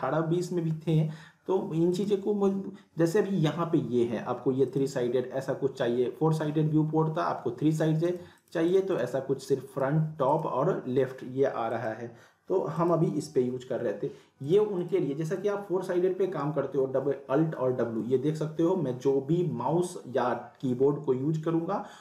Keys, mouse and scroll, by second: 1.9 click, 4.6 click, 8.1 click, 16.8 alt+w.